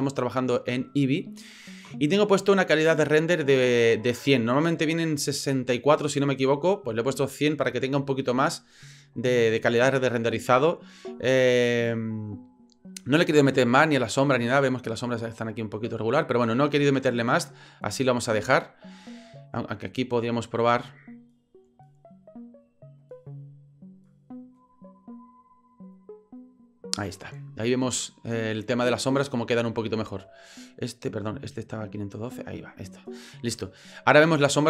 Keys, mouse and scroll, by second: 19.8 click, 21.6-23.2 drag, 24.6-26.1 drag, 30.7-32.0 drag.